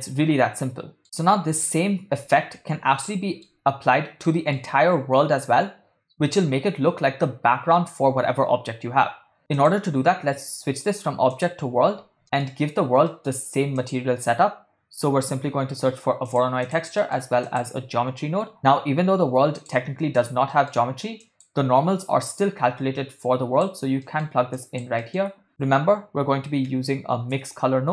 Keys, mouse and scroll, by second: 0.0-1.3 middle drag, 1.2 click, 3.1-3.6 ctrl+middle drag, 4.4 ctrl+middle click, 9.6-11.5 drag, 12.2 middle click, 13.1 middle click, 13.8 shift+a, 17.0 middle click, 17.4 shift+a, 20.5 middle click, 21.2 click, 22.0-23.7 drag, 24.1 middle click, 24.6 click, 25.0 middle click, 25.6 shift+a.